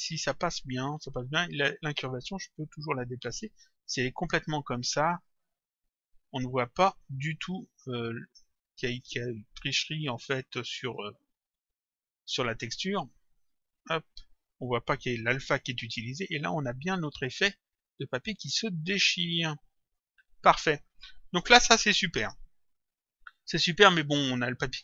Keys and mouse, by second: 1.3 click, 2.8 click, 5.2 click, 7.4 click, 8.1 middle click, 10.0 click, 11.5 middle click, 13.8 click, 16.8 click, 17.9 click, 23.9 click.